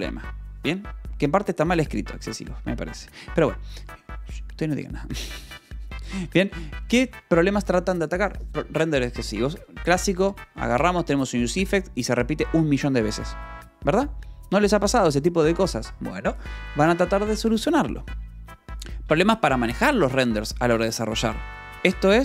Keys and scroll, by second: 2.7 Escape, 5.5-6.5 typing, 19.6 shift+v.